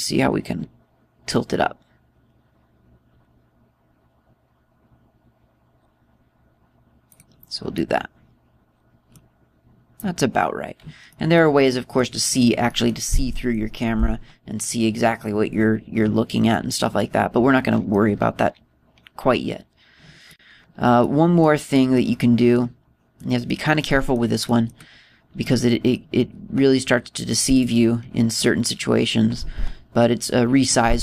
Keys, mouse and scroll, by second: 8.0 click, 8.6 middle click, 12.0 middle click, 12.6 middle click, 13.6 middle click, 14.2 middle click, 20.4-21.0 scroll up 1, 21.0 click, 21.1-21.4 scroll up 2, 21.4 scroll down 2, 21.9 middle click, 22.6 middle click, 22.9 scroll down 1, 23.0 middle click, 24.0 middle click, 24.8 middle click, 25.3 middle click, 26.3 middle click, 28.3 right click, 29.2 scroll up 1, 29.4-30.0 scroll down 1.